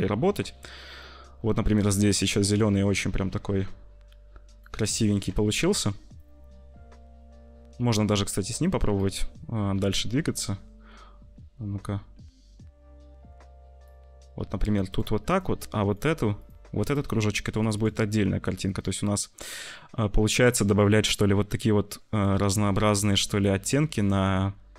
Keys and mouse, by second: 1.0 click, 2.2-4.6 drag, 5.7 ctrl+z, 6.0-7.3 drag, 7.7-8.9 drag, 8.7 c, 9.8-10.8 drag, 15.8 click, 16.3 click, 16.7 click, 17.5 click, 17.6 click, 18.5 click, 19.1-21.1 middle drag, 22.3-24.7 middle drag.